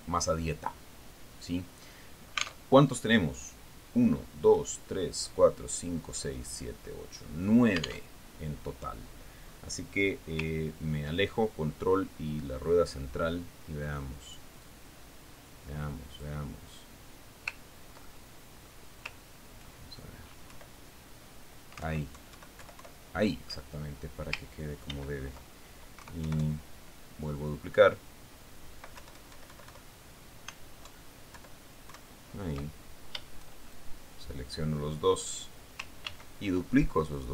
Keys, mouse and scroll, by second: 0.6-3.2 drag, 3.7 alt+middle click, 4.3 alt+Tab, 9.6 alt+Tab, 10.4-10.8 scroll down 2, 10.9-11.4 scroll up 2, 12.0-12.4 ctrl+scroll down 2, 13.6-14.9 middle drag, 15.3-16.0 drag, 16.1-17.9 drag, 19.0-19.4 ctrl+scroll up 1, 19.5 ctrl+middle click, 22.0 Left, 23.2 alt+Right, 24.0 alt+Left, 26.4 ctrl+d, 27.5 Right, 30.5 Left, 32.4 alt+Right, 32.8 alt+Left, 35.2-37.0 shift+drag.